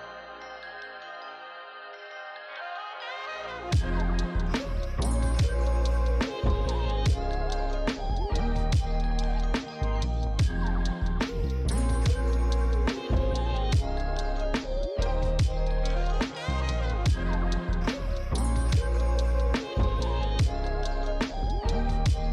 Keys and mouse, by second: 4.1 click.